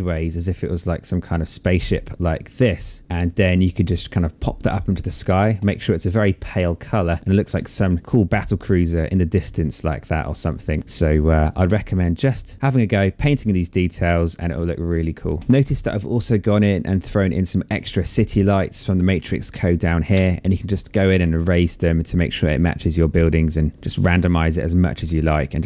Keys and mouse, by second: 0.7 click, 2.8 click, 4.7 Return, 5.1 click, 7.6 click, 12.2 click, 13.3 alt+click, 14.4 click, 15.8 click, 19.2 e, 20.2 click, 23.0 click, 24.2 click.